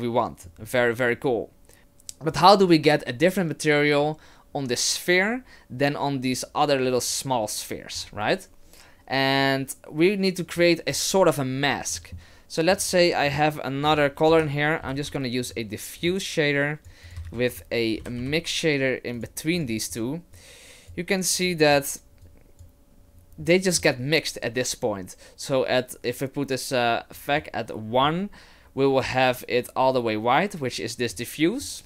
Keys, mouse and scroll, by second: 12.0 middle click, 12.9 shift+a, 15.0 f, 16.6 click, 17.0 click, 17.2 shift+a, 20.3 click, 21.5 click, 22.2 click, 27.1 click, 31.1 click.